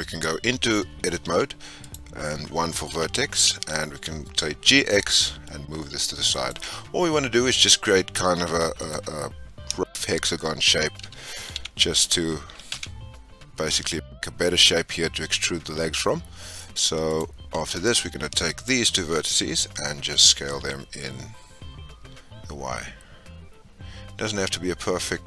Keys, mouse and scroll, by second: 1.8 click, 2.9 g, 7.4 click, 8.7 click, 9.8 shift+click, 11.0 g, 17.7 click, 18.5 shift+click, 20.1 s.